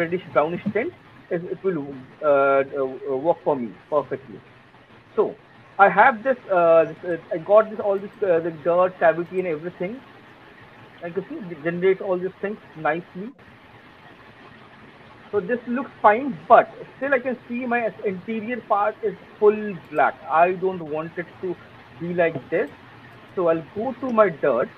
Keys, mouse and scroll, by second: 1.3 alt+middle click, 1.7 alt+middle click, 3.2 alt+middle click, 3.5 alt+middle click, 4.0 alt+middle click, 4.4 alt+middle click, 4.8 alt+click, 5.5 alt+click, 6.3 alt+middle click, 7.1 alt+middle click, 7.3 alt+click, 8.2 alt+middle click, 10.8 alt+right click, 13.6 alt+middle click, 13.7 alt+click, 14.8 alt+middle click, 20.6 alt+middle click, 21.3 alt+middle click, 22.3 alt+click, 23.4 click, 24.1 click.